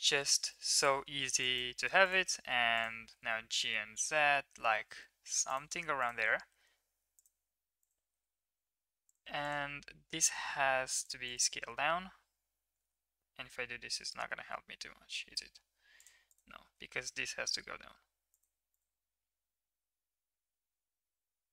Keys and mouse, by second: 1.4 click, 3.0 g, 5.9 middle click, 6.1 g, 8.1 g, 9.9 s, 11.2 middle click, 12.7 g, 16.2 click, 16.6 g, 19.2 g.